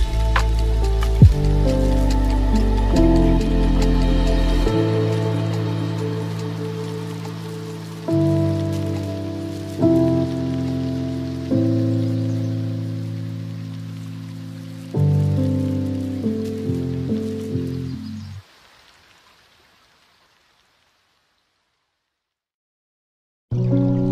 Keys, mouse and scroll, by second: 7.1 KP_0, 8.8 space, 10.3-12.2 drag, 12.2 space, 12.5-12.8 scroll up 2, 13.2-14.1 scroll up 8, 14.1 scroll down 2, 15.0-16.8 drag, 16.8 KP_0, 19.9-24.1 drag.